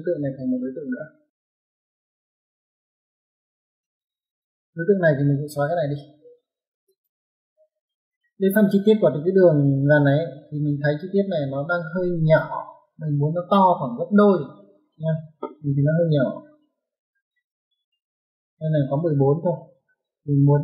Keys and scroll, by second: 1.0-1.8 typing, 3.4 space, 3.6 ctrl+1, 19.7 Escape.